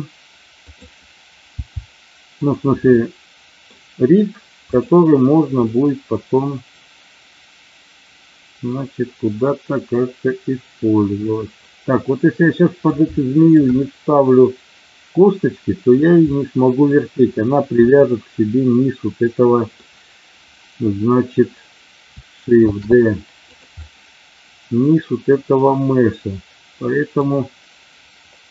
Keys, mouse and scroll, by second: 0.6 click, 1.6 g, 2.9 middle click, 4.7 click, 5.6-12.8 middle drag, 13.1 shift+middle click, 13.8-15.8 middle drag, 16.2 middle click, 17.8-19.7 middle drag, 22.7 shift+d, 23.3 click, 23.9-27.2 middle drag.